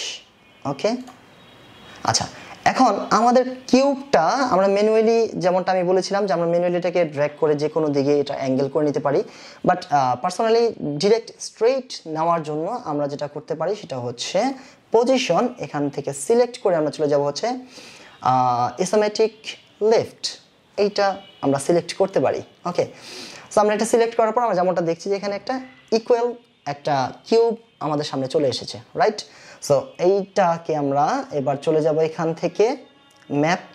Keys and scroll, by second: 0.5 KP_4.